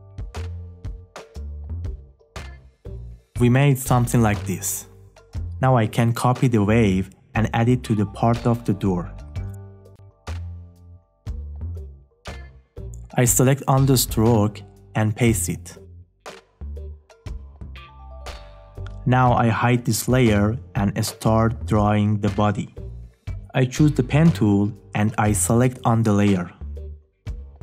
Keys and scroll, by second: 8.4 ctrl+c, 14.0 ctrl+v.